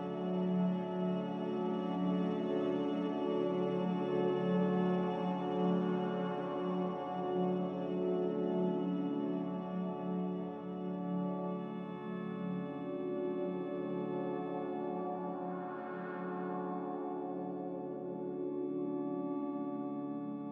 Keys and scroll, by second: 0.2-0.9 typing, 3.9-5.7 typing, 6.4 Return, 7.2 z, 16.0 5.